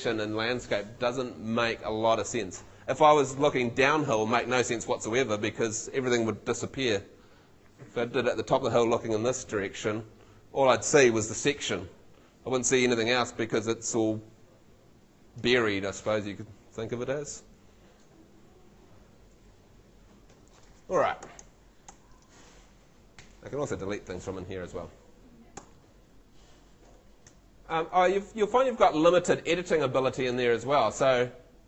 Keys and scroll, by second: 21.2 Escape, 23.2 BackSpace, 25.6 F2, 27.3 F3, 28.0 super+F3, 28.1 super+z.